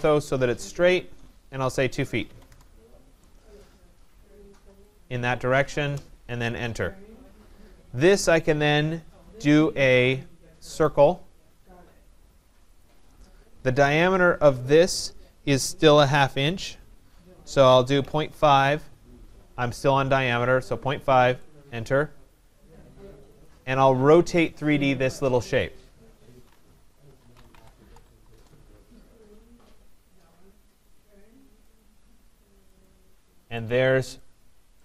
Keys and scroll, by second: 2.4 Return, 21.3 Return, 28.2 Return.